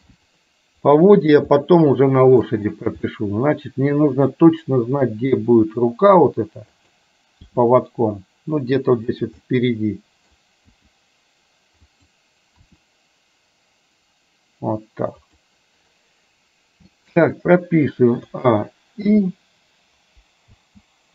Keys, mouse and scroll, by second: 1.2 middle click, 2.2-2.6 shift+middle drag, 3.1-3.4 scroll up 1, 3.4-4.4 middle drag, 5.8 r, 7.6 g, 9.4-10.4 middle drag, 10.9 g, 12.8 r, 18.3 a, 19.2 i, 20.7 space.